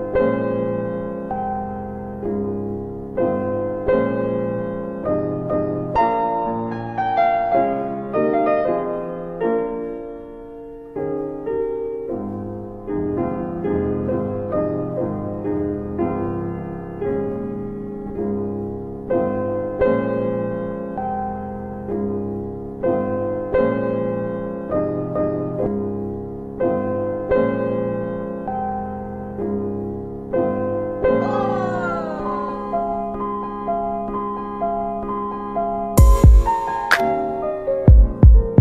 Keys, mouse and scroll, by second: 0.2 middle click, 0.6 alt+middle click, 1.8-2.6 scroll up 1, 3.6 click, 4.6 click, 6.6 4, 7.8 click, 8.6 Delete, 10.2 1, 12.0 click, 13.2 click, 17.6 double right click, 18.1 w, 21.3 click, 25.3 w, 26.2 alt+middle click, 27.1 middle click, 27.8 alt+middle click, 29.9 click, 30.7 alt+w, 31.6 middle click, 31.6-32.0 scroll down 1, 32.6-33.0 scroll down 2, 33.8 middle click, 35.9 click, 37.4 click, 37.8 middle click.